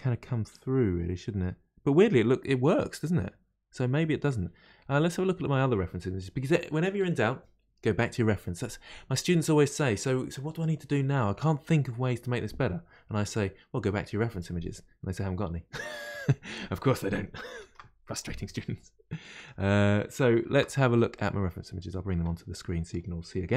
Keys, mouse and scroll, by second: 17.7 ctrl+f.